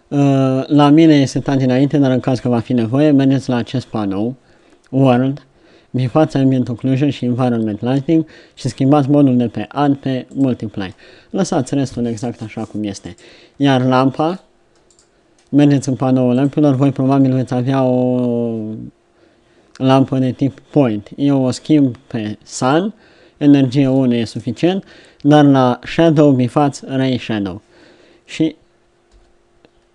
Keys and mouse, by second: 14.1 middle click, 29.0 KP_0.